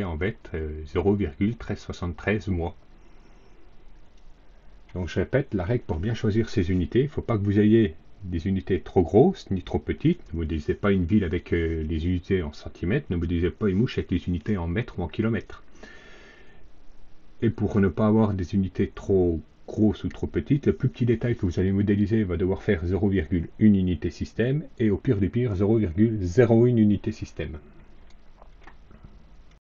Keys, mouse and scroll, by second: 3.9 click, 29.4 click.